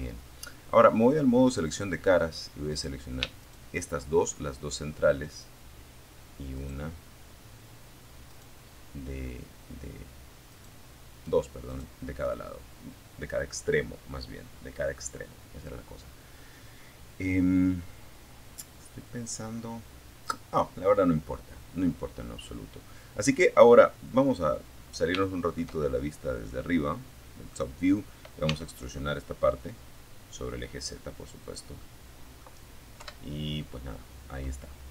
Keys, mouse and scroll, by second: 0.9 right click, 1.6 shift+right click, 4.8 shift+right click, 6.5 shift+right click, 8.7 shift+right click, 9.9 shift+right click, 20.6 scroll down 2, 21.9-22.9 middle drag, 23.4 shift+middle click, 24.0-24.3 shift+scroll up 1, 24.8-25.9 middle drag, 26.6 e, 29.6 click, 30.0 middle click, 31.2 KP_7, 31.8-32.1 scroll down 1.